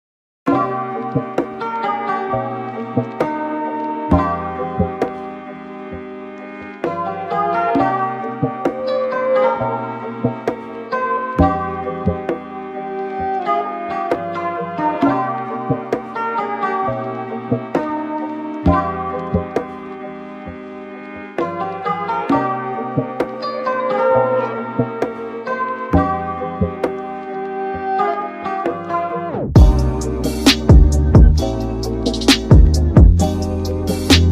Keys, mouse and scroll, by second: 1.4 click, 2.4 click, 3.2-5.9 drag, 8.4 g, 9.9-10.5 drag, 10.5 g, 13.6 middle drag, 13.9 scroll up 5, 14.6 scroll down 2, 14.8-16.2 middle drag, 16.2 KP_7, 16.8 scroll down 1, 17.5 KP_1, 18.2 scroll up 4, 18.6-21.0 shift+middle drag, 21.0 click, 21.5-22.8 middle drag, 22.8 click, 23.5-25.2 drag, 28.7-30.4 drag, 30.8-32.0 middle drag, 32.0-34.2 drag.